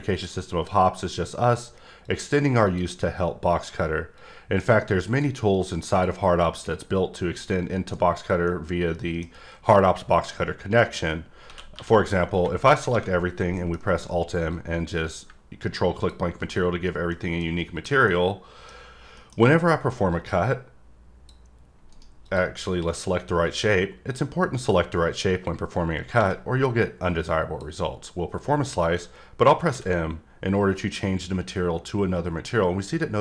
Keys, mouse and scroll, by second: 2.0 click, 2.6 click, 4.2 click, 5.9 click, 7.4 middle click, 8.1-8.5 scroll up 1, 8.5 middle click, 10.3 middle click, 14.5 click, 17.1 middle click, 17.7 click, 18.0 middle click, 19.2 middle click, 20.1 click, 21.9 right click, 23.8 drag, 26.3 click, 27.4-27.8 drag.